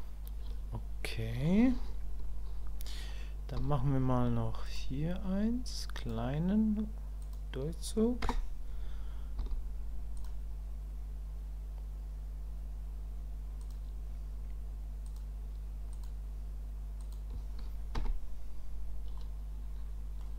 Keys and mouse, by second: 19.2-20.2 middle drag.